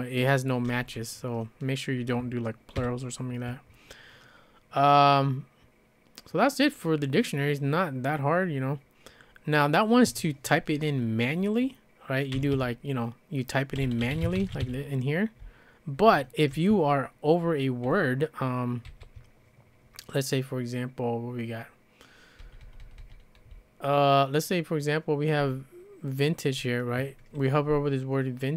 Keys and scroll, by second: 2.8 typing, 12.1-16.5 typing, 18.9 ctrl+c, 22.4-25.5 typing.